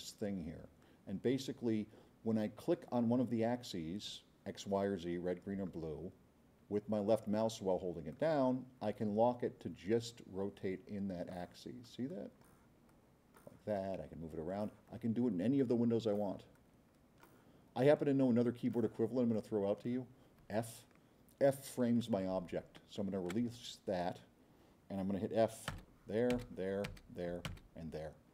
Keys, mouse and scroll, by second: 8.1-11.4 drag, 11.9 click, 12.9-14.0 drag, 14.6 click, 16.3 click, 18.0 click, 19.3 click, 25.7 f.